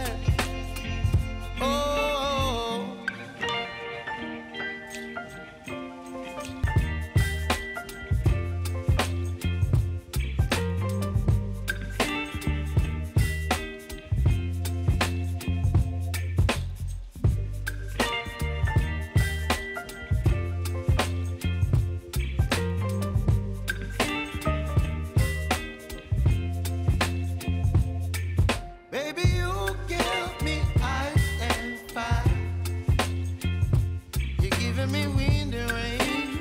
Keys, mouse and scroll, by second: 0.3-2.8 drag, 2.8 ctrl+c, 3.0 ctrl+v, 4.6-6.6 drag, 7.9-10.6 alt+drag, 11.0 space, 13.8 space, 14.6-16.0 drag, 16.7 u, 17.5 click, 19.2 s, 19.7-22.1 drag, 22.1 alt+scroll up 1, 23.1-25.7 drag, 25.7 ctrl+d, 26.2-29.5 drag, 30.6 click, 33.1-35.5 drag, 35.5 Return, 36.2 click.